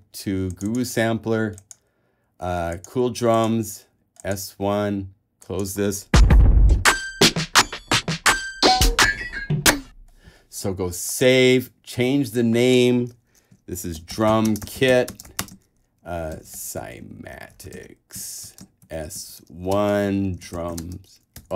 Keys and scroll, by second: 13.7-21.5 typing.